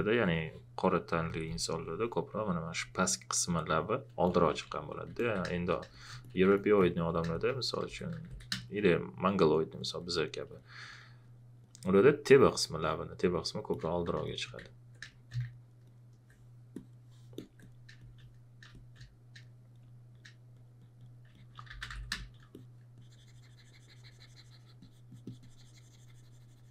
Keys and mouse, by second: 0.2 alt+click, 5.5 space, 5.9 click, 7.2-8.7 typing, 7.3 click, 8.6 click, 10.5 space, 11.0 click, 11.2 alt+click, 14.2 space, 15.0 space, 15.1 click, 15.5 alt+click, 18.7 space, 21.2 click, 21.2-22.4 typing, 21.3 click, 22.1 click.